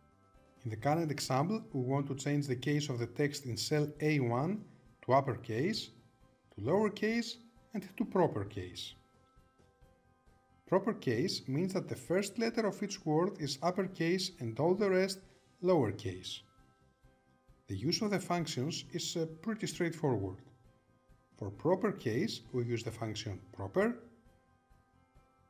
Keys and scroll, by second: 23.7 Tab.